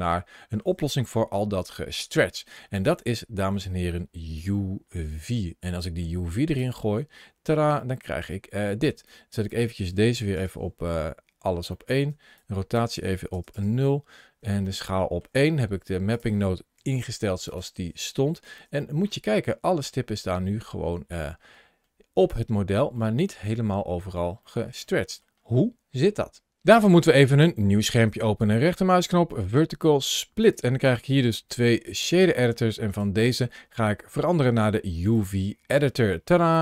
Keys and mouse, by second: 1.5 shift+click, 3.0 shift+click, 4.2 click, 4.4-6.5 drag, 7.7 shift+middle click, 9.0-10.3 shift+drag, 11.6 shift+middle click, 12.3-13.5 shift+drag, 14.7 shift+middle click, 16.0 shift+click, 16.6 g, 18.3 shift+middle click, 18.7-22.1 middle drag, 22.8 shift+middle click, 23.4 middle click, 24.3 shift+middle click, 24.7-25.1 middle drag, 28.7-30.5 right drag, 32.9-35.1 drag, 36.4 click.